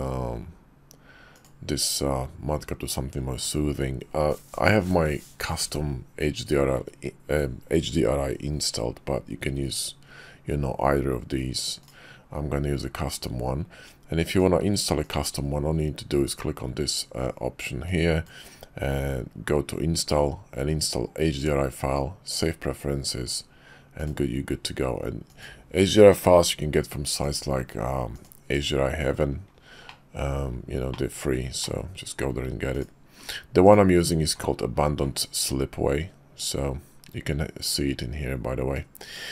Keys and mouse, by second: 14.3-21.9 drag, 25.2-28.7 drag, 29.9 click, 31.0-31.3 drag, 31.6-32.3 shift+middle drag, 32.7 click, 33.6 click, 38.8 click.